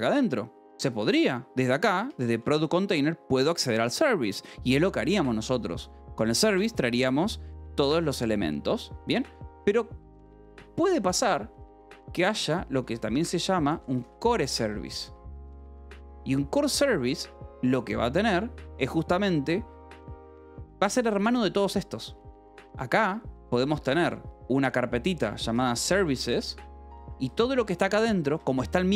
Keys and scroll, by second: 1.3 j, 2.0 k, 2.5 j, 2.9 Escape, 9.0 u, 10.9 Escape, 11.2 l, 12.3-16.6 typing, 12.8 Escape, 15.9 Escape, 18.2 j, 19.4 j, 20.1 k, 22.6 a, 22.8 Return, 25.1-28.9 typing, 28.2 Escape.